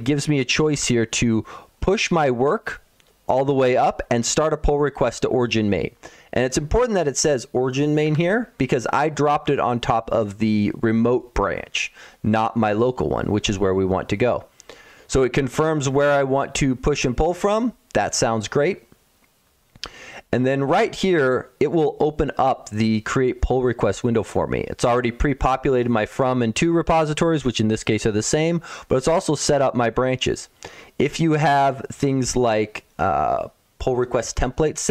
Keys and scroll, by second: 0.4 ctrl+1, 7.9 Escape.